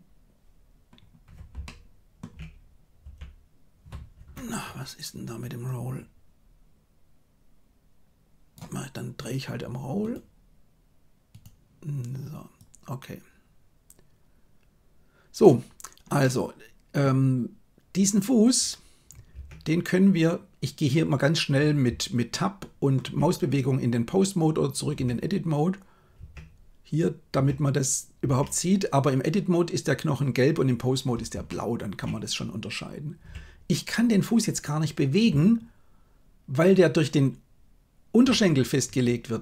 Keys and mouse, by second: 1.6 shift+middle click, 2.9 r, 5.6-8.5 drag, 12.6-15.5 drag, 16.1 middle click, 19.4 Tab, 22.3-22.9 shift+middle drag, 24.9 Tab, 26.1 Tab, 27.4 Tab, 28.2 Tab, 31.4-31.9 shift+middle drag, 33.3 g.